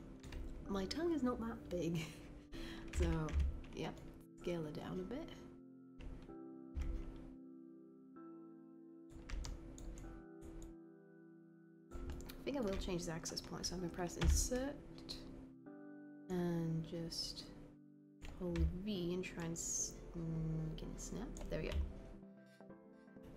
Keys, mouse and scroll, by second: 3.3 r, 6.8 w, 16.9 v.